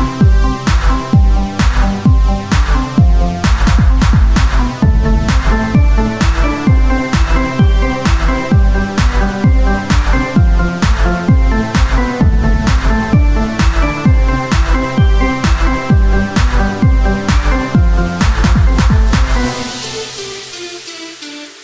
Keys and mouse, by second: 0.2 o, 0.5 s, 2.6 g, 5.8 s, 8.6 Tab, 11.0 KP_1, 15.7 z.